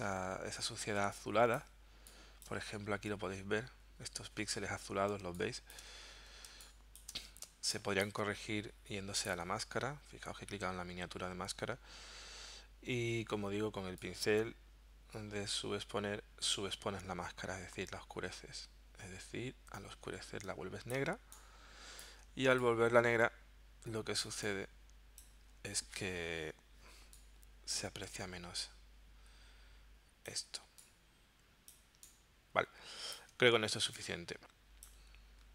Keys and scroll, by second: 5.2 space, 6.5 space, 7.4 space, 21.0 space, 24.3 space, 30.5 space.